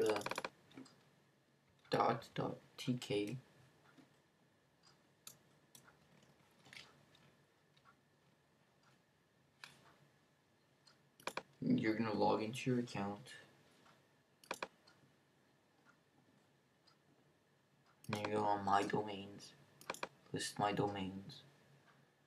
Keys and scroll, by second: 1.4-4.2 typing.